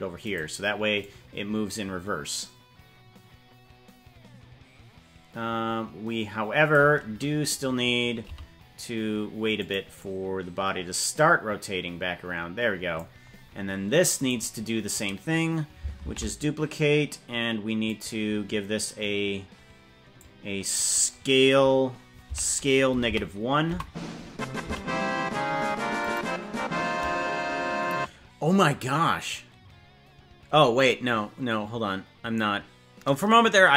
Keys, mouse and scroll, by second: 1.0-6.7 drag, 8.2 g, 9.9-12.9 drag, 14.3 right click, 16.1 shift+d, 20.1 click, 22.3 s, 24.7 g.